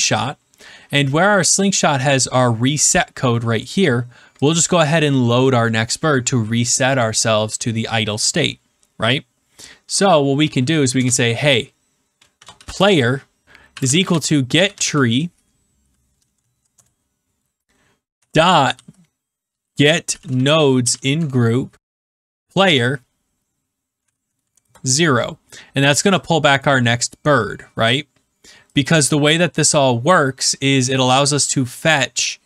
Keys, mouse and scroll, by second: 3.6 click, 4.4 click, 10.9 Return, 12.0-15.3 typing, 16.3 Down, 16.7 Return, 18.4-25.0 typing, 26.6 click, 29.3 click, 30.4 click, 30.9 click.